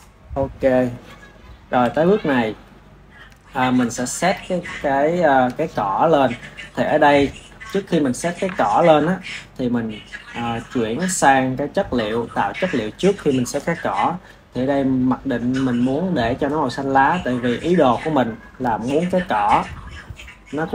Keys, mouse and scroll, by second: 1.7 KP_1, 2.7-4.1 ctrl+middle drag, 4.1 ctrl+s, 4.8-15.6 ctrl+middle drag, 15.6 Left, 16.5 Left.